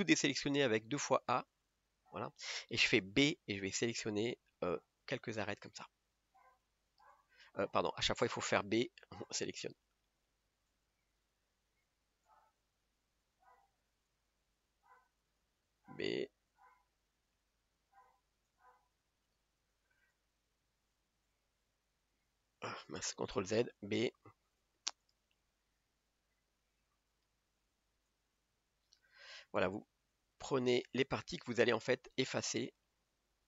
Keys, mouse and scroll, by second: 1.6 a, 1.7 a, 4.6 b, 6.4 click, 7.8 click, 9.8 b, 11.2 b, 17.1 b, 17.5 scroll up 2, 19.3 b, 22.6 click, 23.8 ctrl+z, 27.2 b, 29.0 b.